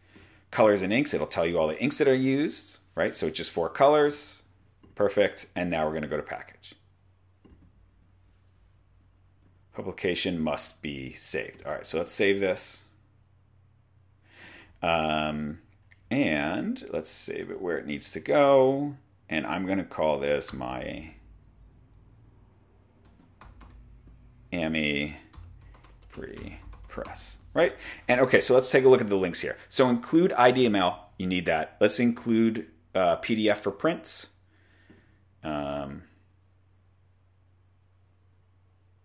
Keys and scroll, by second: 20.3-21.1 typing, 22.9-24.1 typing, 25.3-27.7 typing.